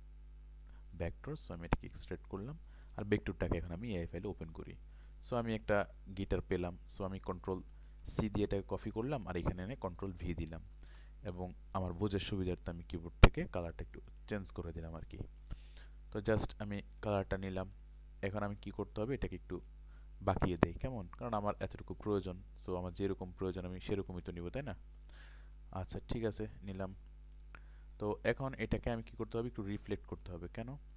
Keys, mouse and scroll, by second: 0.6 click, 8.0 ctrl+c, 8.9 click, 10.0 ctrl+v, 10.6 ctrl+space, 10.7 ctrl+click, 12.2 i, 14.1 click, 17.4 ctrl+space, 17.4 click, 29.5 ctrl+space, 29.6 click.